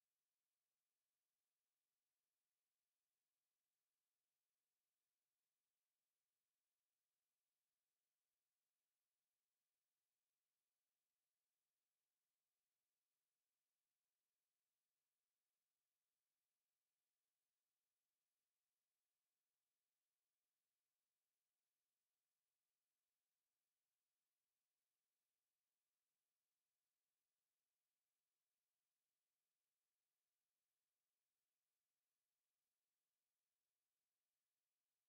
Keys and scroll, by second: 2.3 ctrl+x, 3.9 ctrl+v, 4.5 ctrl+a.